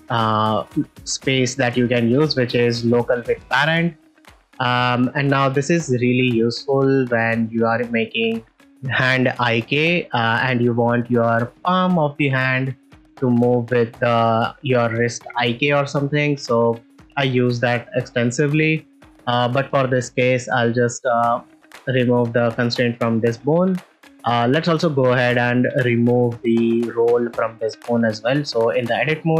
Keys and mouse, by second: 4.1 click, 5.0 middle click, 5.9 shift+middle click, 6.2 ctrl+middle click, 6.5-7.1 middle drag, 8.2 ctrl+middle click, 10.5 ctrl+middle click, 11.1 shift+middle drag, 16.3 ctrl+middle click, 16.7 middle click, 18.1-18.5 middle drag, 22.5 middle click, 24.3 click, 26.7 click, 28.2 Tab.